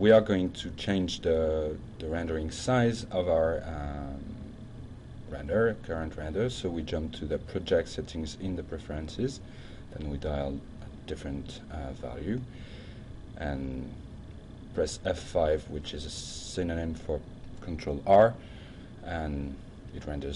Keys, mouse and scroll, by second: 0.0 click, 0.3 click, 4.6 click, 5.6 click, 6.2 click, 8.4 click, 9.4 shift+1, 9.8 shift+0, 10.5 Tab, 11.4-12.3 typing, 12.4 Return, 13.3 click, 13.8 F5.